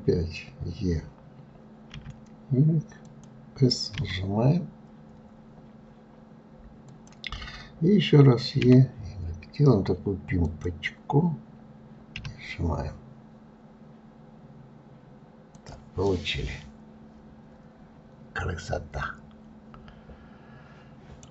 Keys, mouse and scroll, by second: 16.0-19.0 middle drag.